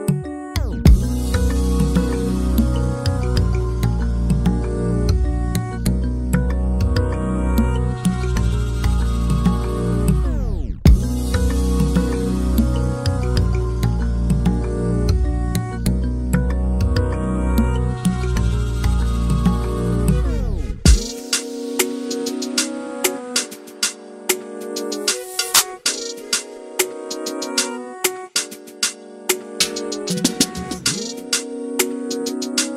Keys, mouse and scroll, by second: 0.0 middle click, 0.4 shift+middle drag, 0.6 Tab, 0.7 middle click, 1.2 2, 1.4 click, 2.6 x, 3.2 middle click, 3.7 click, 5.5 s, 6.4 scroll down 2, 6.5 Tab, 6.6 alt+a, 6.7 middle click, 7.2 click, 7.4 scroll down 1, 7.5 alt+a, 7.6 scroll up 2, 7.7 scroll down 1, 7.8 middle click, 8.1 KP_1, 8.5-8.9 scroll up 2, 8.8 shift+middle click, 8.9 click, 9.0 Tab, 9.5 3, 9.6 alt+z, 9.8 click, 10.0 alt+z, 10.7 shift+d, 11.1 p, 11.5 Tab, 11.6 alt+a, 11.7 click, 12.1 s, 12.6 Tab, 12.7 alt+a, 12.9 Tab, 13.0 alt+a, 13.1 shift+middle click, 13.2 scroll up 2, 14.8 scroll down 1, 14.9-15.3 scroll up 1, 15.6 click, 16.7 shift+middle click, 16.8 scroll up 1, 16.9 Tab, 17.0 alt+z, 17.5 click, 18.5 scroll up 2, 18.7 a, 19.3 s, 19.4-19.9 scroll up 2, 19.5 shift+middle click, 20.2 click, 20.6-21.5 scroll up 2, 21.8 3, 22.1 /, 22.3 middle click, 22.4 alt+z, 22.6 middle click, 22.7 x, 23.1 middle click, 23.4 click, 23.5 middle click, 23.8 i, 24.1-24.4 scroll down 1, 24.4 Tab, 24.7 ctrl+3, 25.0 right click, 25.2 alt+a, 25.3 click, 25.5 Tab, 25.9 i, 26.3 Tab, 26.5 alt+a, 26.5 middle click, 26.7 click, 26.7 scroll up 2, 26.8 Tab, 27.0 middle click, 27.3 ctrl+r, 28.0 click, 29.0 ctrl+r, 29.6 click, 31.2 3, 31.3 click, 32.2 i.